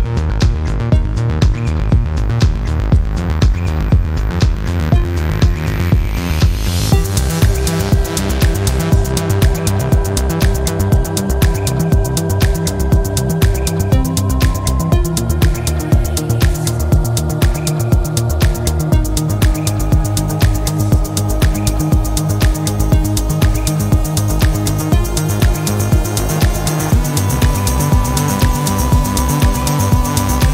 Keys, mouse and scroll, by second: 0.4 click, 3.6 click, 6.5 click, 7.8 click, 9.8 click, 11.8 click, 13.2 click, 14.8 click, 16.3 click, 17.9 click, 19.8-21.6 drag, 22.9-25.0 drag, 26.8 click, 29.7 click.